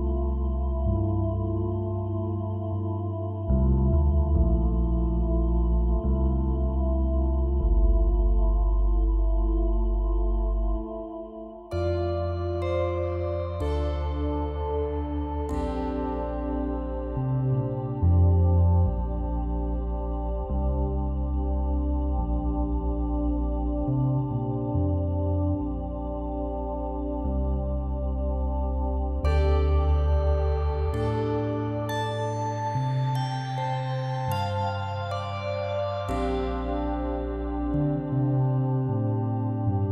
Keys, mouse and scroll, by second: 0.8 scroll down 2, 1.1-2.6 middle drag, 2.6 ctrl+s, 3.0 scroll down 2, 4.6 shift+a, 4.9 KP_Divide, 5.4 s, 6.4 middle click, 6.8 s, 8.3 s, 8.9 Tab, 9.3 3, 9.5 click, 10.1 i, 11.2 e, 12.0-13.3 middle drag, 13.3 Tab, 13.7-15.2 middle drag, 17.8 KP_1, 18.3 s, 19.3 s, 21.6 g, 22.5 s, 23.5 r, 24.9 scroll up 3, 25.1 shift+middle click, 26.3 s, 29.7 shift+z, 30.0 click, 30.5 Tab, 30.7 click, 31.3 s, 33.1 r, 35.2 click, 36.4 ctrl+r, 37.4 click, 38.2 shift+d, 39.3 p.